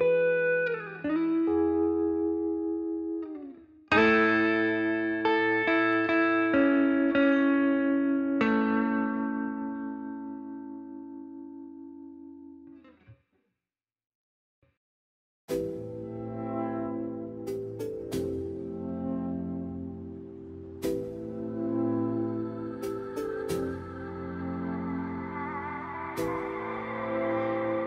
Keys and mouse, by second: 0.1 click, 0.6 click, 1.1 r, 3.2 click, 4.1 click, 4.6 click, 5.4 r, 6.0 middle click, 6.6 shift+middle click, 6.9 middle drag, 7.5 click, 8.0-8.5 middle drag, 9.7 click, 10.2 middle click, 10.7 middle click, 11.2 click, 11.4 shift+d, 11.8 click, 12.3 ctrl+z, 12.4 middle click, 12.8 middle click, 13.2 click, 13.7 s, 14.4 middle click, 14.8 s, 15.8 middle drag, 16.9-17.4 drag, 17.8 s, 19.1 s, 20.3 middle click, 21.1 click, 21.8 r, 23.4 s, 25.1 middle drag, 25.6-26.5 middle drag, 26.6-27.1 middle drag, 27.5 middle drag.